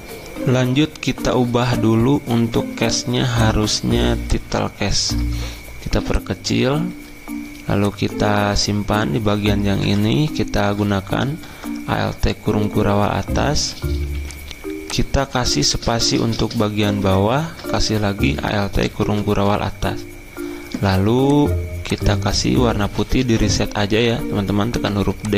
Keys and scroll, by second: 1.4 F10, 9.8 alt+Up, 10.0 alt+Up, 10.5 alt+Up, 14.1 t, 15.3 ctrl+a, 18.5 alt+Up, 18.7 alt+Up, 22.9 d.